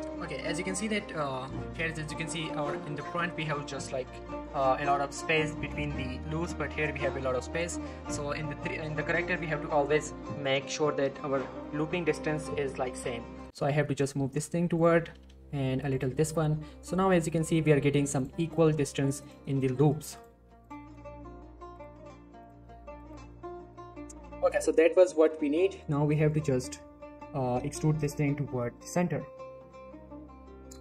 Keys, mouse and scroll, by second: 0.8-1.3 scroll up 1, 1.3 scroll down 1, 1.4 middle click, 4.3-5.8 scroll up 1, 6.3 middle click, 6.5-7.0 scroll up 1, 7.0 scroll down 1, 7.1 middle click, 7.3 scroll up 1, 7.9 middle click, 8.8 click, 9.3 middle click, 10.3 ctrl+shift+click, 10.7 middle click, 11.3 scroll up 1, 11.5 middle click, 12.2 g, 12.3 g, 13.4 click, 13.5 middle click, 14.0 click, 14.8 ctrl+shift+click, 15.1 g, 15.3 g, 15.9 click, 16.1 middle click, 17.2 click, 17.3 middle click, 17.6 g, 17.8 g, 18.2 click, 18.8 g, 19.0 g, 19.2 click, 19.4 middle click, 20.1 click, 20.6 ctrl+shift+click, 20.8 ctrl+middle click, 21.1 g, 21.2 g, 21.7 click, 21.9 middle click, 22.4 click, 22.5 g, 22.7 g, 23.0-23.8 click, 23.2-23.5 scroll down 1, 24.3 scroll up 1, 24.5 middle click, 25.0-25.7 scroll up 1, 25.7 click, 27.5-27.9 shift+middle click.